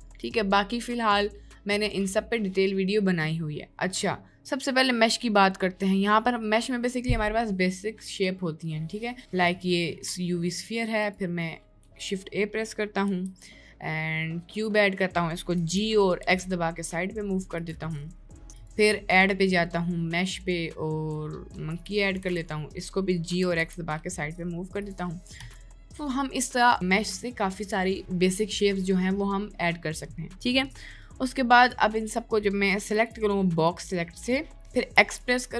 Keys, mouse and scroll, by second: 10.0-10.4 middle drag, 11.1-11.8 drag, 13.1 shift+a, 15.6 g, 18.0 middle click, 18.7-22.2 drag.